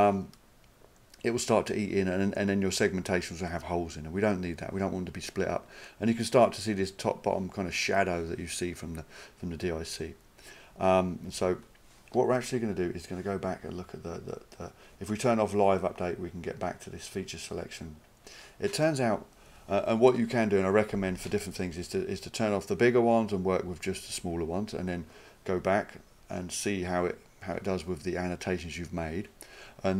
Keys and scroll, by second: 2.8 s, 11.3 s.